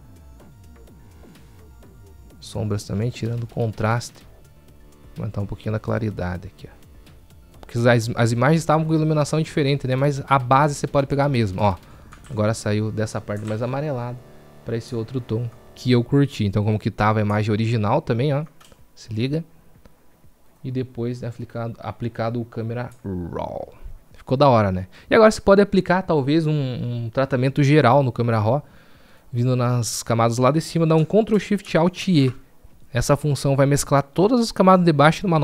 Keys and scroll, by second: 31.2 ctrl+alt+shift+e.